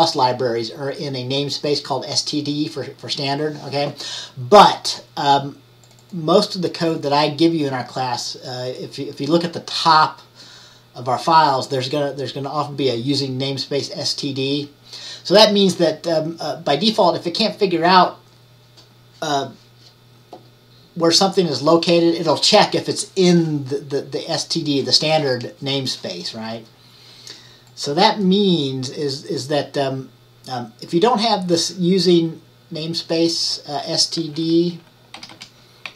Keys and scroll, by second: 35.3 typing.